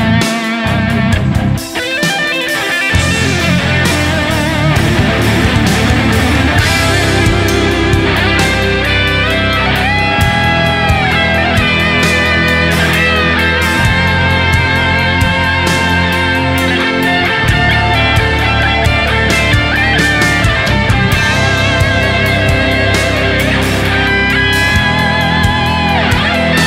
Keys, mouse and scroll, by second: 1.9 right click, 3.1 alt+right click, 9.5 s, 10.6 typing, 10.8 double click, 14.7 alt+right click.